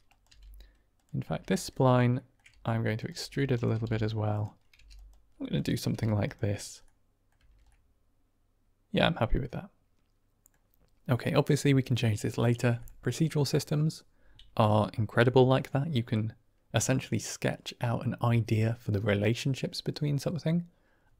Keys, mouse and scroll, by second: 0.1 click, 0.2 g, 0.8 click, 1.1 r, 1.4 click, 2.1 shift+click, 2.2 shift+middle click, 2.4 e, 2.9 click, 3.1 r, 3.4 click, 4.1 g, 4.2 click, 4.6 g, 4.8 click, 5.2 r, 5.8 g, 6.1 click, 6.7 middle click, 7.3 Tab, 7.6-10.4 middle drag, 15.1-15.8 middle drag.